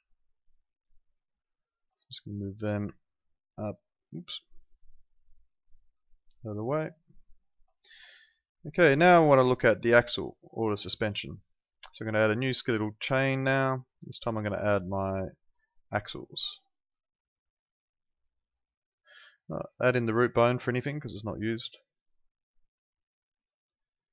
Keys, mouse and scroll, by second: 0.3 ctrl+click, 7.8 click, 10.6 right click, 12.7 click, 16.6 right click, 17.5 click, 20.3 right click, 21.8 click.